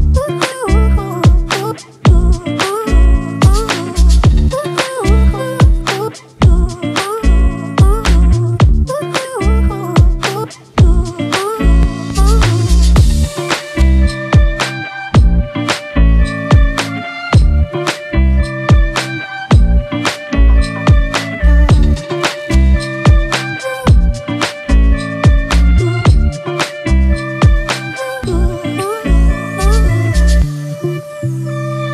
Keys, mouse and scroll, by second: 6.8 double click.